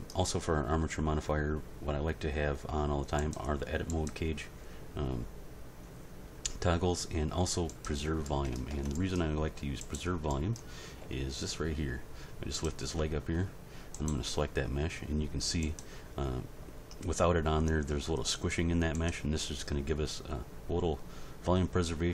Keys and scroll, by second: 8.7 Tab, 11.0 g.